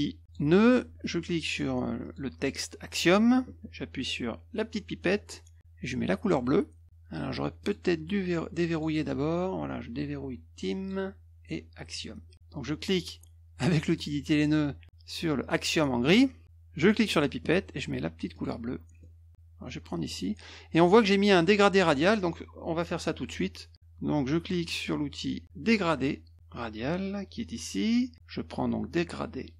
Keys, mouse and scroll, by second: 0.2 click, 2.0 click, 5.0 click, 6.2 click, 6.8 ctrl+z, 7.6 click, 8.7 click, 10.8 click, 11.9 click, 13.8 click, 14.8 click, 15.4 click, 17.1 click, 18.3 click, 19.0 middle click, 20.1 click, 27.4 click.